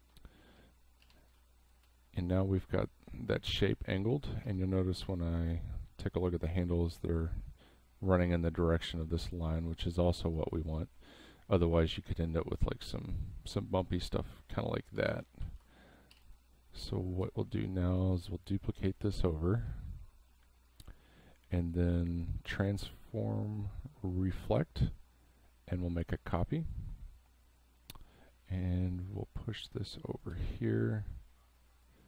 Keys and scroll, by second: 1.0 v, 1.4 space, 4.4 a, 10.2 v, 15.1 ctrl+z, 16.1 v, 19.1 space.